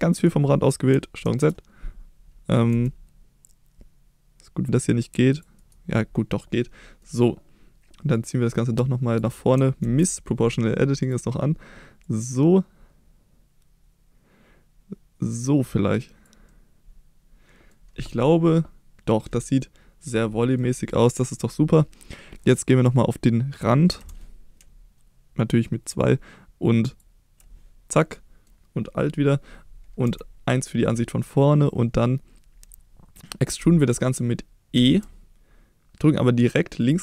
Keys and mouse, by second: 0.1 right click, 1.2 ctrl+z, 2.7 c, 5.6 right click, 6.4 middle click, 8.2-9.2 drag, 9.9 ctrl+z, 11.0 click, 12.1-16.3 drag, 16.5-17.7 middle drag, 18.2-19.3 middle drag, 19.6 middle click, 20.4 middle click, 24.0 2, 26.9 alt+click, 28.1 middle click, 30.1 KP_1, 34.8 e, 36.8 click.